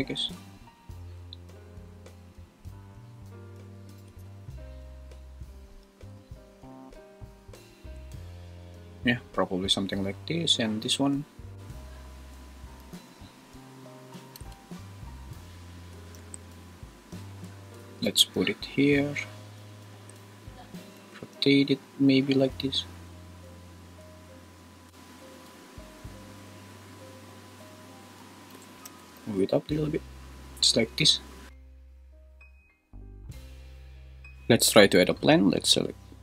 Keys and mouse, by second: 0.0 click, 0.2 g, 2.2 click, 4.0 g, 4.2 y, 5.6 click, 5.9 s, 7.3 click, 7.8 `, 12.9 s, 14.1 click, 14.4 g, 16.0 click, 16.1 `, 18.0 g, 19.9 `, 20.9 r, 28.5 g, 28.9 z.